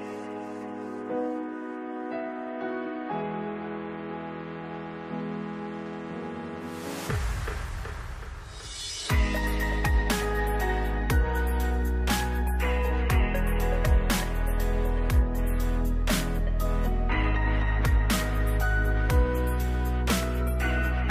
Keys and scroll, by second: 1.1 ctrl+s.